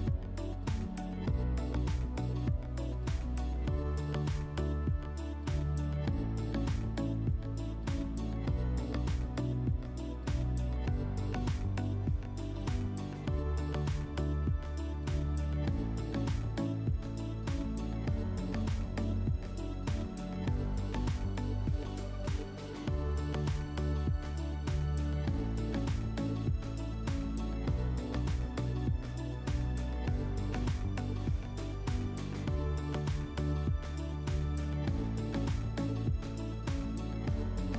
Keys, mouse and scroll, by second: 0.0-0.9 typing, 2.8 click, 3.3 w, 7.1 click, 8.1 scroll, 9.5 click, 12.0-13.6 right drag, 14.7-16.3 drag, 16.5-18.0 drag, 18.5 right click, 20.2 click, 21.3 click, 22.1 ctrl+click, 24.0 right click, 26.4 right click, 28.2 click, 29.9 click, 30.0 click, 30.9-32.3 typing, 34.1-35.7 drag, 34.5 w, 37.1-37.7 drag.